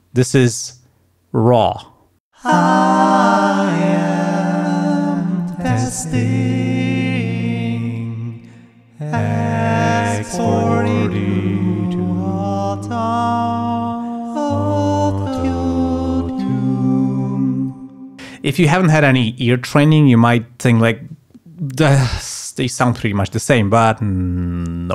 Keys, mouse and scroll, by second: 2.4 space, 19.4 space.